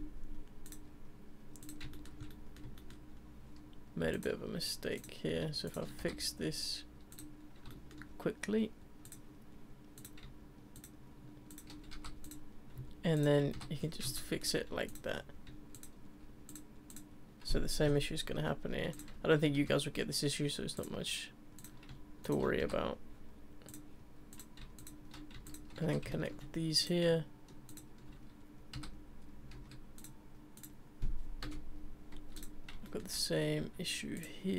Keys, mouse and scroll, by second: 1.9-2.2 shift+middle drag, 2.2 scroll up 2, 2.3-4.1 middle drag, 4.1 click, 5.0 click, 5.6 shift+click, 6.0 f, 7.1 click, 7.7-9.0 shift+middle drag, 9.0 click, 9.9 click, 10.7 shift+click, 11.5 shift+click, 11.9 f, 12.2 click, 13.1 shift+click, 13.5 f, 13.8-14.1 scroll down 6, 14.1-14.9 shift+middle drag, 14.9 click, 15.2-15.7 scroll up 1, 15.7 shift+click, 16.5 click, 16.9 click, 17.8 Delete, 19.3-19.6 shift+middle drag, 19.6-20.4 scroll up 3, 20.7 click, 21.6 click, 22.2 shift+click, 22.6 f, 23.7 click, 24.3 click, 24.8 shift+click, 25.4 shift+click, 25.8 f, 26.1-26.8 shift+middle drag, 26.8 click, 27.7 shift+click, 28.7 f, 29.5 ctrl+z, 30.0 click, 30.5 click, 31.4 Delete, 32.8-34.1 shift+middle drag, 34.1 click.